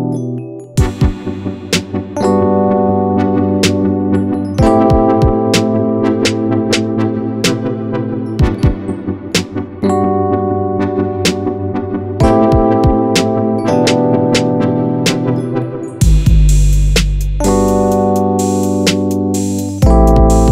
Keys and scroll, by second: 2.5 ctrl+a, 5.6 ctrl+-, 6.3 ctrl+=, 17.5 ctrl+v.